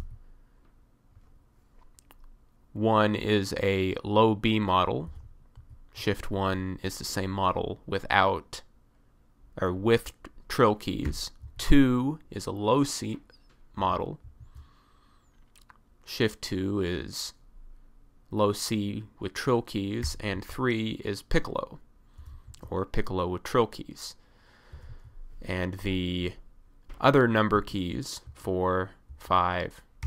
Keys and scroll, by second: 0.0 1, 5.1 BackSpace, 11.1 BackSpace, 13.9 BackSpace, 20.1 BackSpace, 22.2 BackSpace, 22.7 #, 24.8 BackSpace, 28.3 4, 29.1 5.